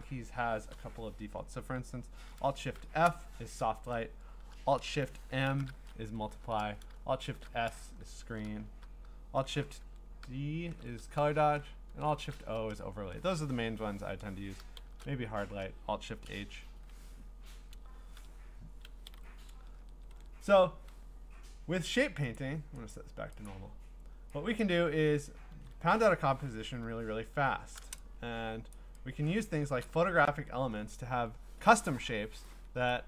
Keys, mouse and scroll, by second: 1.4 click, 2.8 alt+shift+f, 5.5 alt+shift+m, 7.2 alt+shift+s, 9.9 alt+shift+d, 12.0 alt+shift+o, 14.8 alt+shift+h, 18.1 ctrl+a, 19.1 Delete, 20.1 ctrl+d, 22.4 click, 22.9 click, 23.5 click, 24.6 click, 25.5 ctrl+z, 26.9-27.8 ctrl+scroll, 28.5-33.0 scroll, 28.7 click, 29.9 click.